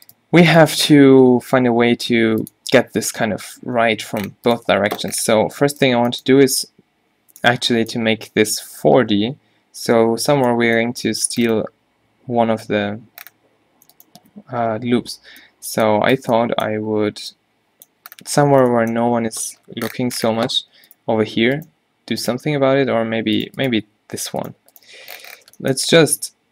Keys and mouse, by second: 1.1 g, 4.1 Tab, 4.9 Tab, 5.9-6.3 middle drag, 10.4 middle click, 10.9 middle click, 11.2-11.6 middle drag, 12.7-13.1 middle drag, 13.3 middle click, 17.8 middle click, 19.0 middle click, 19.7 middle click, 20.0 middle drag, 20.2 middle click, 21.0-23.3 drag, 23.3-24.7 right drag, 25.1 middle click, 26.1 x.